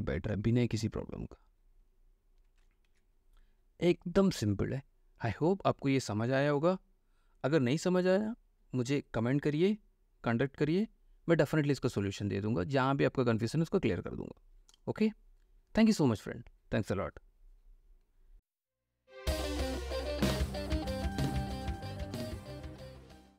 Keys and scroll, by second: 3.1 ctrl+w.